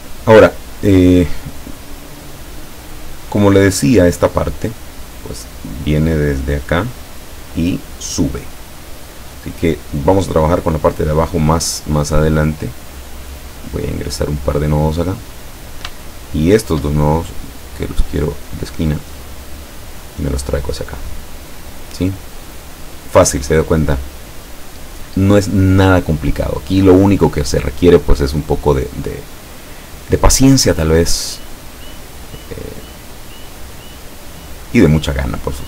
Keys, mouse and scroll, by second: 13.6 click, 15.3 click, 16.4 shift+click, 18.3 click, 20.0-23.1 drag, 27.1-29.6 drag, 29.7 click, 30.2-31.6 drag, 32.1-34.9 drag.